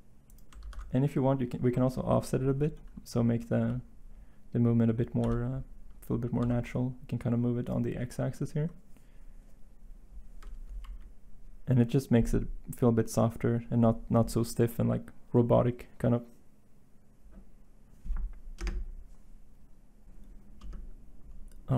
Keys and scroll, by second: 0.6 ctrl+z, 5.2 g, 6.3 x, 10.7 End.